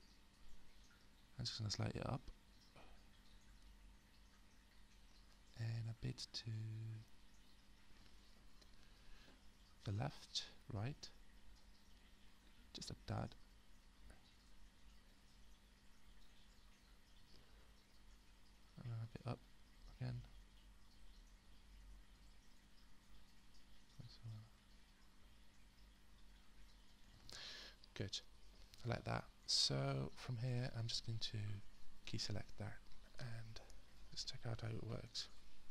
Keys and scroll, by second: 35.0 space.